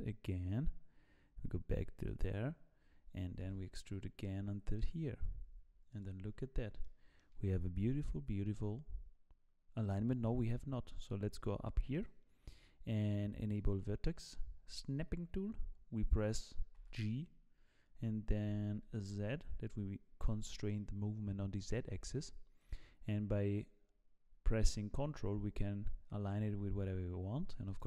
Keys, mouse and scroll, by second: 5.0 e, 6.8 shift+middle click, 11.9 click, 16.7 g.